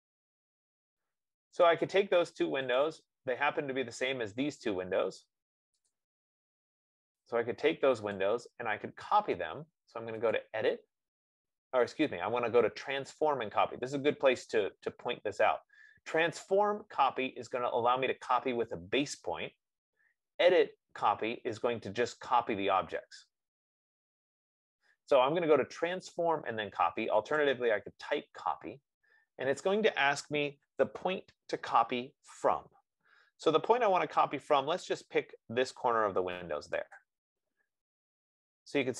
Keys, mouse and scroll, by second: 2.0 click, 3.2 click, 6.1 click, 8.4 click, 27.8-32.7 drag, 37.4-38.9 drag.